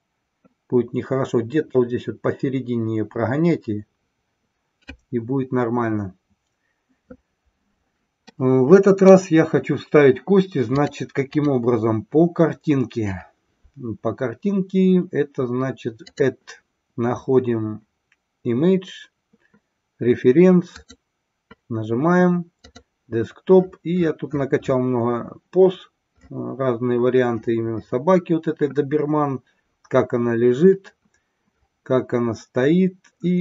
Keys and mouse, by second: 8.4-9.2 middle drag, 10.9-11.5 drag, 16.0-21.2 drag.